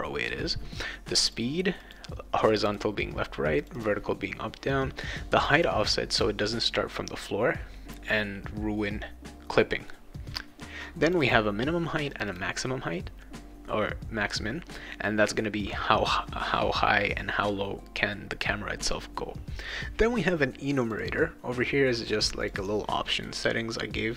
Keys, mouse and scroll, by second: 1.2 click, 1.8 click, 2.5 click, 2.7 click, 3.6 click, 5.4 click, 5.5 click, 11.0 click, 12.1 click, 20.8 click, 21.0 click, 22.4 click, 22.6 click, 23.1 click.